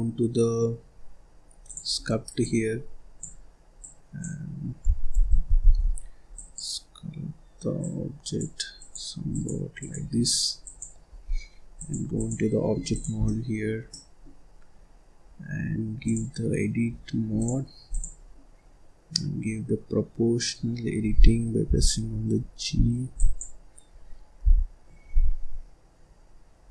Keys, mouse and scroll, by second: 5.1 ctrl+z, 5.5 ctrl+z, 6.3-12.9 drag, 13.2-14.4 middle drag, 14.4-15.1 scroll up 1, 15.1-15.9 scroll up 1, 15.9 click, 17.2-20.3 drag, 20.7-21.1 scroll up 1, 21.1-21.5 scroll down 2, 21.5 g, 21.9-22.7 scroll up 1, 22.7-23.1 scroll down 1, 23.1 click, 23.9-24.3 scroll up 1, 24.3 g.